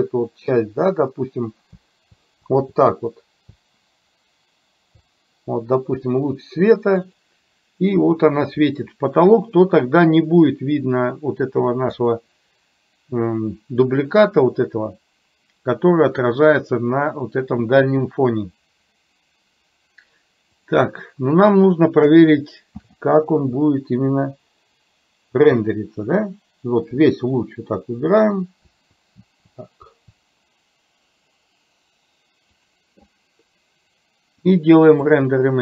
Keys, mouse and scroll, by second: 12.1 click, 20.6 click, 22.9 shift+f, 34.5-35.6 drag.